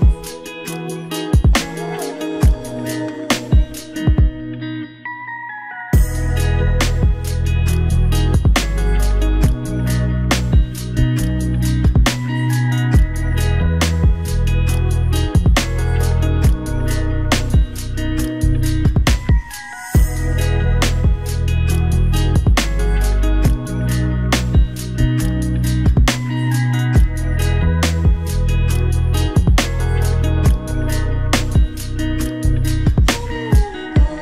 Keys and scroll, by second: 33.7 ctrl+d.